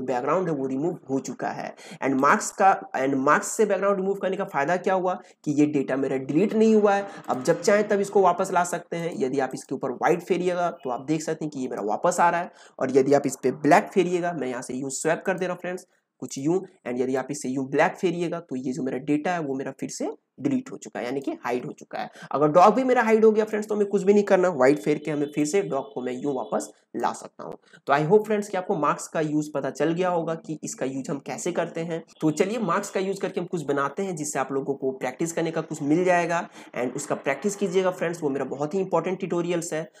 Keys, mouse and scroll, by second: 2.1 click, 7.2-15.2 drag, 7.2 p, 15.2-24.6 drag, 24.6 x, 25.3-40.0 drag.